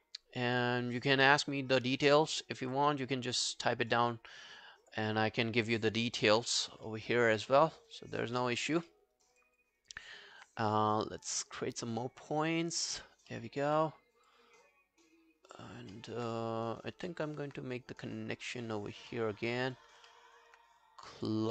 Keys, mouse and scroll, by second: 6.9 alt+middle click, 7.2 alt+right click, 7.8 alt+right click, 8.1 alt+click, 8.4 alt+middle click, 8.6 alt+right click, 8.9 alt+middle click, 9.2 alt+right click, 9.4 alt+click, 9.8 alt+right click, 13.4 alt+middle click, 14.7 double click, 16.0 alt+middle click, 17.0 alt+middle click, 17.1 alt+middle click, 19.6 alt+right click, 20.1 alt+middle click.